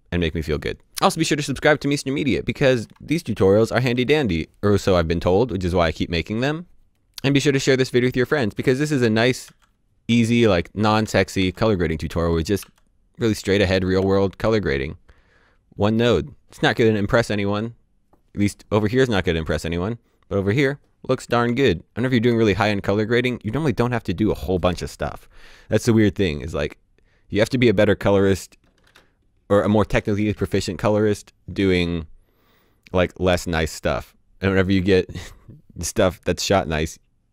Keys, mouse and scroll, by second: 3.5-3.9 typing, 9.0-12.6 typing, 13.6 d, 13.9 d, 21.5 d, 22.0 d.